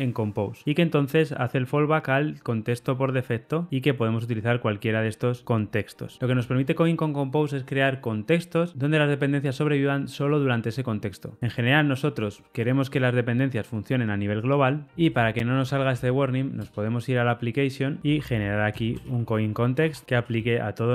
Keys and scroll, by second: 20.3 Return.